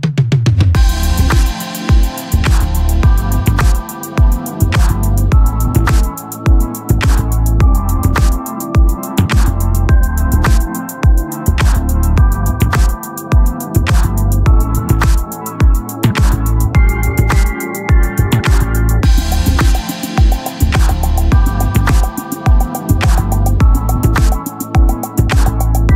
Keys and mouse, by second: 7.9 click, 14.4 ctrl+z, 16.2 click, 19.8 click, 23.7 click.